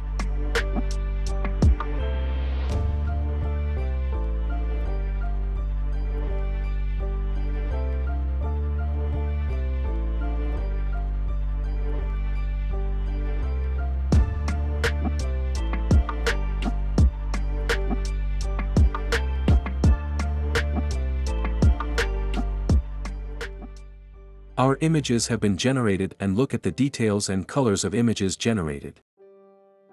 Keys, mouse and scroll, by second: 1.7 ctrl+c, 1.9 click, 2.9 click, 3.7 ctrl+a, 4.4 ctrl+v, 7.0-8.0 drag, 9.1 click, 10.8-11.9 drag, 14.0 click, 18.5 click, 27.5 click, 29.7 click.